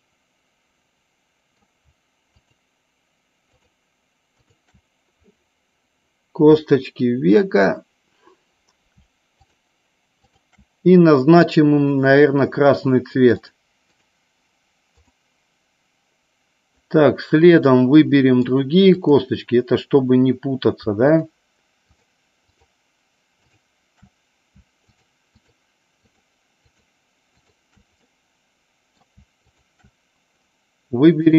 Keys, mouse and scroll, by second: 2.4 shift+click, 3.7 shift+click, 4.5 shift+click, 10.3 shift+click, 13.4 click, 14.0 click, 15.1 click, 18.1 middle click, 19.1 click, 21.3 shift+click, 22.6 shift+click, 24.9 shift+click, 25.6 shift+click, 26.2 shift+click, 26.8 shift+click, 27.4 shift+click, 28.2 middle click, 29.6 shift+click.